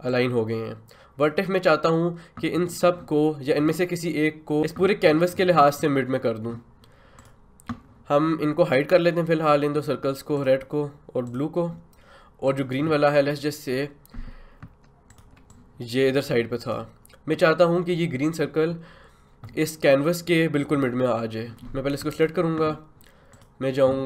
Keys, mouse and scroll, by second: 0.1-7.1 drag, 7.2 click, 10.3 click, 15.1-21.5 ctrl+drag.